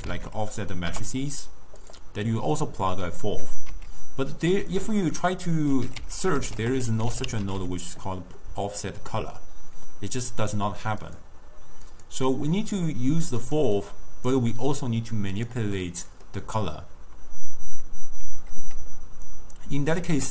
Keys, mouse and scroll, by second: 3.5 click, 4.1 x, 4.7 ctrl+a, 6.2 f, 12.0 click, 12.3-13.6 drag, 13.8-15.0 drag, 15.8-18.9 middle drag, 20.1 ctrl+a.